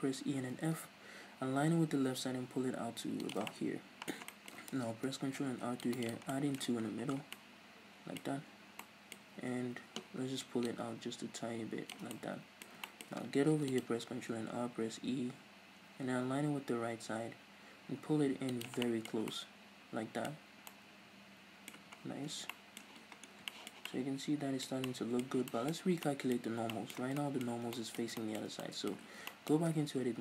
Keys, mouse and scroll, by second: 3.4 shift+click, 3.5-6.1 middle drag, 4.9 ctrl+r, 6.1 click, 6.1 right click, 6.3-10.7 middle drag, 6.8 Tab, 6.9-7.3 scroll down 2, 8.2-8.9 scroll up 2, 9.2 scroll up 2, 9.4 Tab, 10.7-12.1 drag, 12.1-30.2 middle drag, 13.5 ctrl+r, 18.6 shift+click, 19.1 Tab, 20.4 scroll up 2, 21.8 a, 22.0 scroll down 2, 22.2 a, 23.0-23.5 scroll down 2, 25.3-26.0 scroll up 4, 26.4-26.7 scroll up 2, 29.7 Tab.